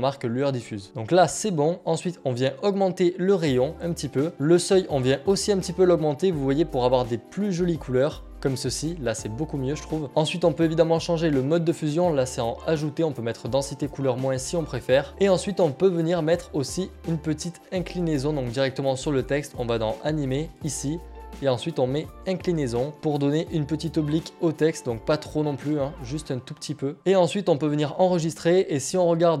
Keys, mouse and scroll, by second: 0.4 click, 3.3 click, 8.0 click, 10.7 click, 15.1 click, 18.0 click, 19.5 click, 23.1 click, 25.7 click, 27.2 click.